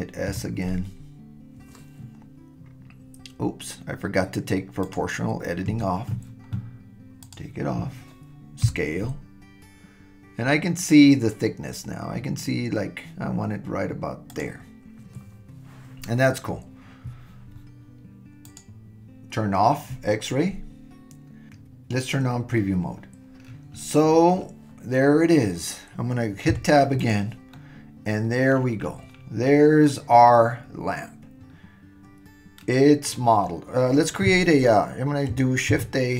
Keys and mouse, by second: 0.3 s, 5.7 super+z, 7.2 click, 8.6 s, 18.4 click, 26.5 Tab, 27.5-28.5 middle drag, 29.8-32.8 middle drag, 32.8 click, 32.8 right click, 35.7 shift+a.